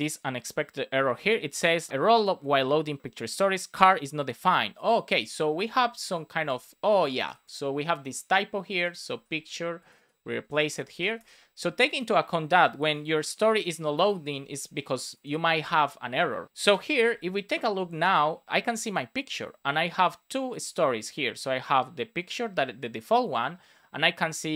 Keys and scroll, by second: 9.0 super+c, 10.8 super+v, 11.1 super+s.